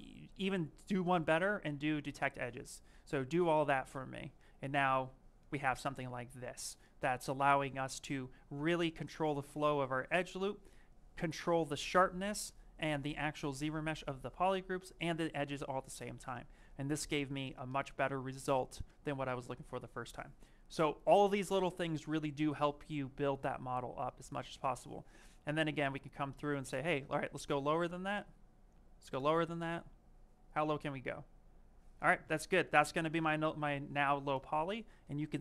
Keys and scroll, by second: 24.2 s.